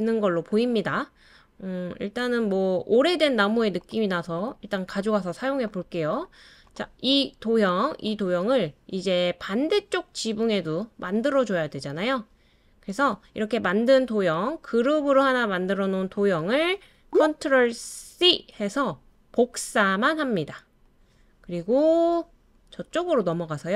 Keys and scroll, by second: 17.1 ctrl+c, 18.3 super+c.